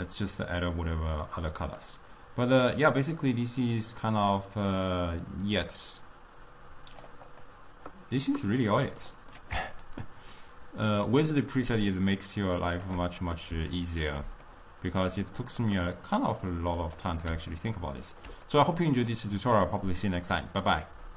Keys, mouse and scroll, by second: 0.5-1.8 drag, 7.3 click, 8.3-10.0 middle drag, 10.0-13.2 shift+drag, 13.2-21.1 middle drag.